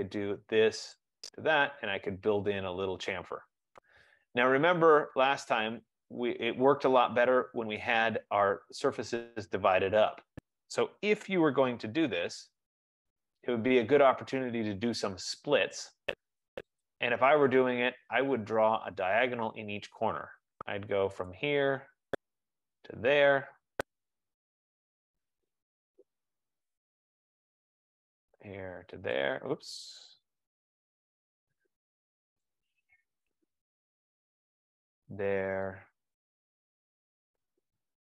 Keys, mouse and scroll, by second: 0.3 click, 1.2 click, 2.4-3.4 scroll, 3.7-4.9 scroll, 5.5-6.1 scroll, 7.4-7.8 scroll, 9.4 scroll, 12.1 ctrl+z, 13.2 scroll, 13.7-14.4 scroll, 15.7-16.4 scroll, 17.0 click, 18.2 scroll, 18.8-20.0 scroll, 21.5 click, 23.0 click, 23.9 Return, 25.8-26.4 scroll, 26.0 F15, 26.5-27.3 scroll, 27.4 right click, 28.1 click, 28.4 scroll down 5, 29.3 click, 29.3 scroll, 30.5 ctrl+z, 32.9 click, 33.5 Return, 34.5 right click, 35.3 click, 36.7 right click, 37.0-37.4 scroll.